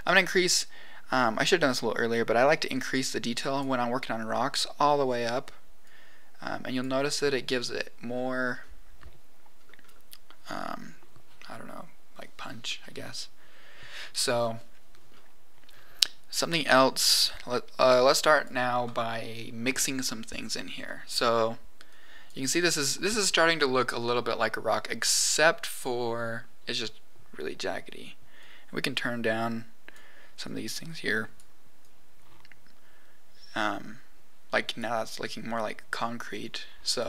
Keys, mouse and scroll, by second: 2.4-3.6 drag, 5.8-6.8 drag, 8.1-8.8 scroll up 3, 9.5-10.3 scroll down 3, 16.8 middle click, 18.3 click, 20.8 middle click, 21.9 click, 28.3-29.9 drag, 30.4 click, 31.8 click, 36.4 click.